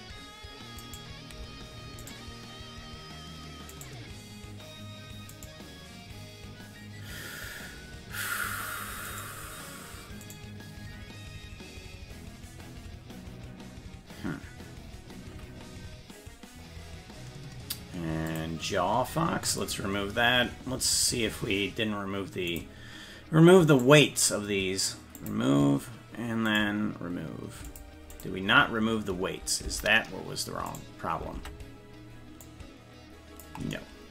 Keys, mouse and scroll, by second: 0.9 shift+right click, 2.1 right click, 3.9 right click, 3.9 right click, 5.4 right click, 9.3 right click, 10.5 right click, 18.3 click, 19.7 click, 20.9 right click, 22.6 click, 23.8 right click, 25.2 click, 26.6 right click, 27.7 click, 28.2 click, 29.7 Tab, 30.8 right click, 31.4 ctrl+Tab, 32.5-33.5 drag.